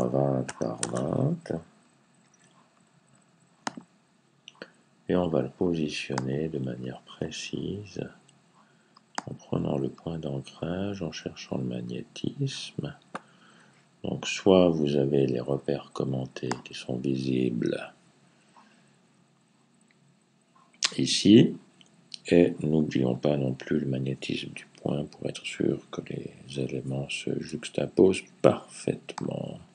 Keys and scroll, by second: 0.0-1.0 typing.